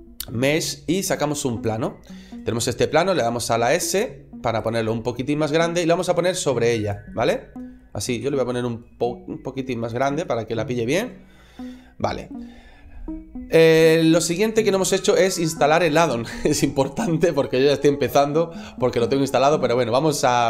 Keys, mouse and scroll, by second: 3.0 s, 4.5 click, 4.7 middle click, 6.0 click, 7.0 middle click, 8.1 s, 9.8 click, 10.1 middle click.